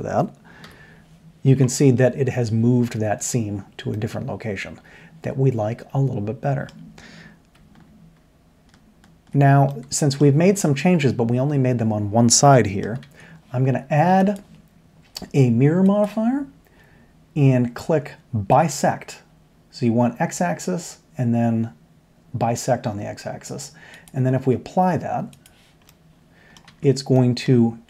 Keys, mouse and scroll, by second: 0.6 l, 1.6-2.2 middle drag, 2.8 middle drag, 5.7-6.9 middle drag, 9.7-10.1 middle drag, 10.2-12.1 middle drag, 12.4 middle click, 13.0 Tab, 18.5 click, 24.0-25.4 drag, 25.8 drag, 26.0-26.7 middle drag, 26.7 Tab.